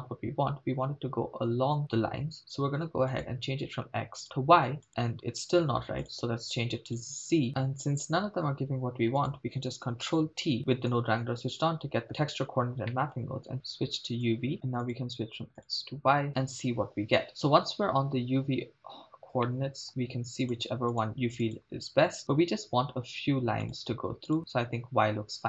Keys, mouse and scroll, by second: 3.1-4.4 drag, 4.9 click, 6.1-7.2 drag, 9.2 click, 10.3 ctrl+t, 10.6 middle click, 12.6 scroll down 1, 12.9 middle click, 13.5-14.5 drag, 14.9-16.0 drag, 17.3 middle click, 19.4-19.9 middle drag, 20.5 click, 20.9-21.8 drag, 23.7-24.4 drag.